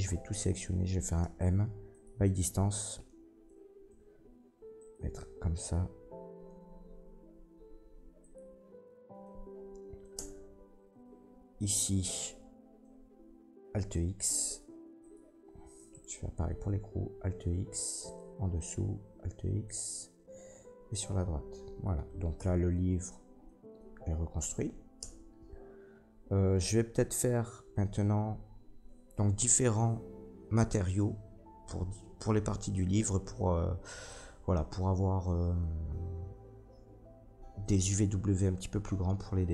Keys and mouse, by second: 0.0 a, 1.2 m, 4.8-15.1 drag, 7.5 m, 10.1 Tab, 13.7 alt+x, 15.1-15.9 middle drag, 15.9 click, 16.0-18.0 middle drag, 16.9 alt+x, 18.0 click, 18.1-19.7 middle drag, 18.8 alt+x, 19.7 click, 20.0-26.9 middle drag, 22.4 Tab, 25.0 Tab, 26.9-39.5 drag.